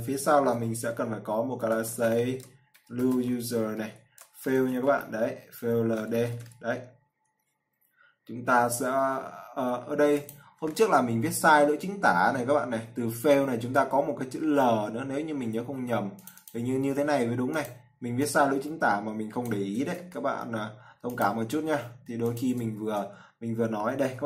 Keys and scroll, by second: 20.3 ctrl+c, 23.2 ctrl+v.